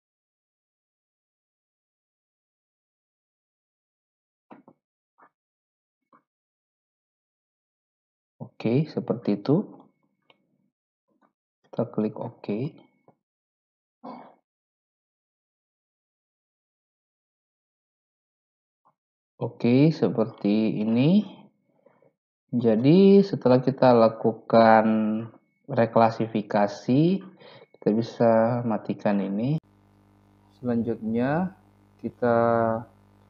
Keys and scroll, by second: 3.7-4.7 typing.